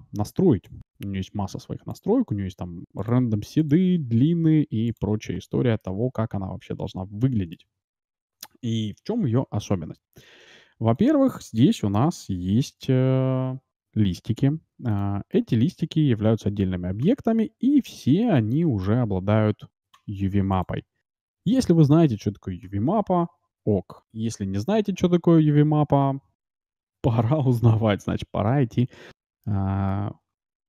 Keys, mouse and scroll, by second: 5.7-7.7 middle drag, 10.1-12.8 middle drag, 10.9-12.8 right drag, 12.8 g, 15.3-17.4 middle drag, 16.3 ctrl+z, 18.3-20.2 drag, 20.5-22.2 drag, 22.7 Tab, 23.9 a, 24.9 a, 26.4 a, 26.8 a, 27.6 a, 28.6-30.6 middle drag.